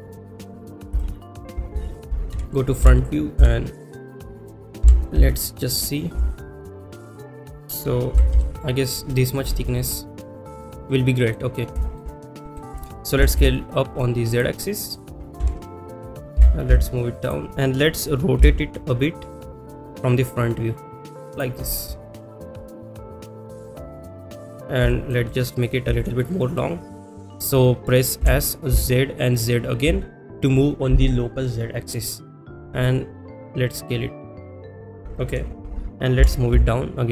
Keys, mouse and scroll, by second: 0.1 click, 0.5 middle click, 1.0 shift+middle click, 4.1 KP_1, 4.1 g, 4.1 x, 5.8 click, 5.8 g, 5.8 z, 7.5 click, 7.5 s, 8.8 click, 8.8 s, 8.8 z, 9.2 middle click, 10.9-11.3 middle drag, 11.8 shift+middle drag, 12.4 middle click, 14.3 click, 14.3 s, 14.3 z, 14.8 middle drag, 17.2 click, 17.2 KP_1, 17.2 g, 17.2 z, 20.9 r, 21.3 click, 23.1-23.6 middle drag, 24.1 middle drag, 24.9 shift+middle click, 25.3 middle drag, 26.0 shift+middle click, 26.4 middle drag.